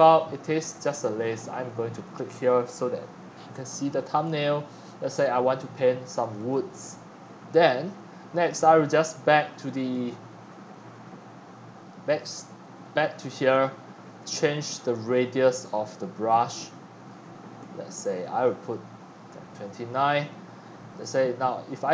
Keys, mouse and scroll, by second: 2.0-11.8 drag, 11.8 right click, 12.7-15.3 drag, 15.5 f, 15.6-19.2 drag, 19.6 scroll up 1, 20.0-21.9 drag.